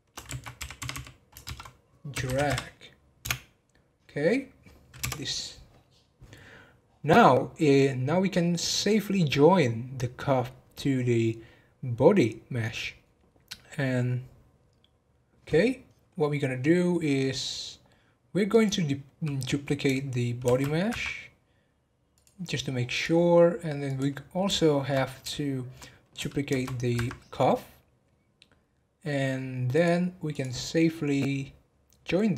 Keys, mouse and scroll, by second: 18.5 click, 20.4 shift+d, 22.1 click, 22.9 click, 23.8 click, 24.5-26.5 shift+middle drag, 26.5 shift+d, 29.7 click, 30.3 click.